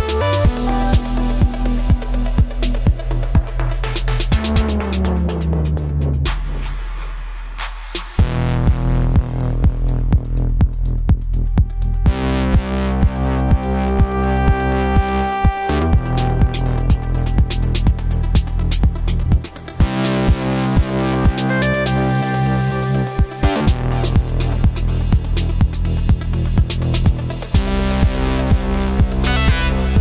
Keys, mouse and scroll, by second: 11.5 right click, 12.5 right click, 14.3 ctrl+t, 15.2 ctrl+t, 16.1 alt+shift+click.